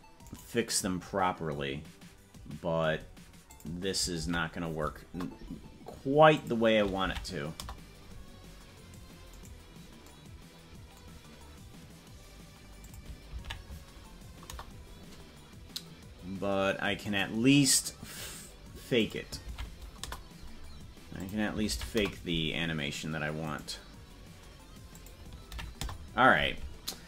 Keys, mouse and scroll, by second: 0.6-3.4 right drag, 3.4-5.6 drag, 6.3-8.0 drag, 9.7-10.2 right drag, 12.8-15.0 drag, 17.4-18.9 right drag, 18.9-20.5 drag, 21.1-22.4 drag, 23.8-24.9 right drag, 24.9-26.3 drag.